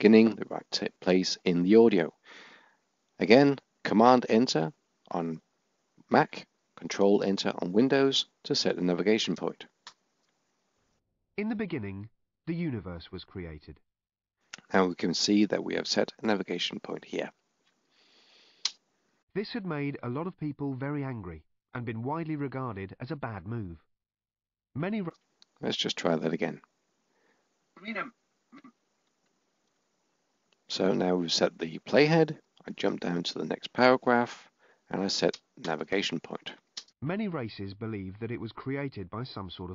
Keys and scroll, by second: 3.0 Return, 31.7 Right.